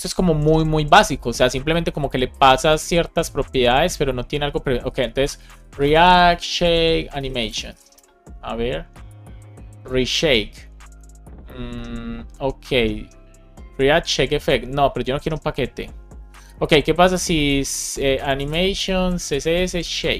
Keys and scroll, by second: 4.7 super+t, 5.9 space, 7.8 Return, 18.9 space, 19.5 space.